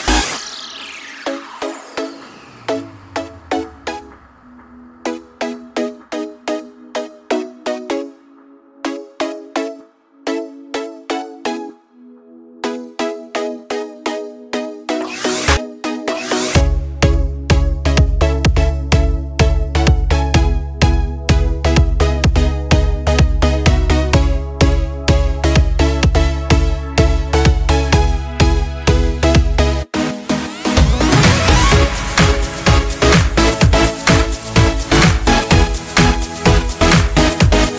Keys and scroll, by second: 8.1 ctrl+space, 8.6 ctrl+space, 9.4-9.8 ctrl+space, 9.9 ctrl+space, 16.7 ctrl+g, 23.3 ctrl+g, 29.9 ctrl+g.